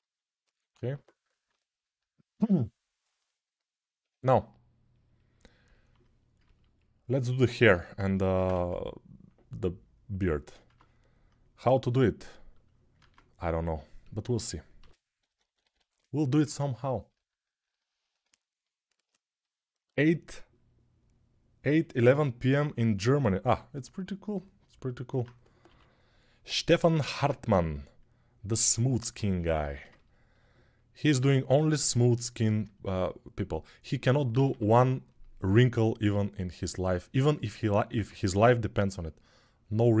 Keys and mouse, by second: 8.0 ctrl+Tab, 8.3 shift+a, 10.4 Tab, 12.4-25.0 middle drag, 12.7 ctrl+Tab, 14.9-16.1 typing, 19.2-34.5 drag, 25.4 6, 27.2 g, 34.2 1, 37.2-40.0 ctrl+drag, 38.1 g.